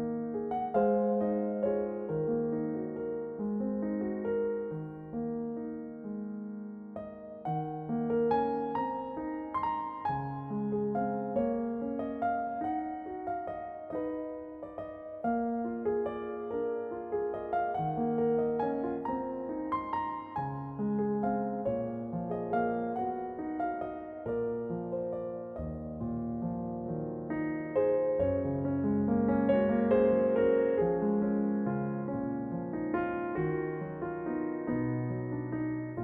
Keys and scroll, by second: 1.2 ctrl+r, 2.2 s, 10.2 r, 12.3 r, 15.8 s, 27.9 shift+c, 31.2 m, 34.6 s.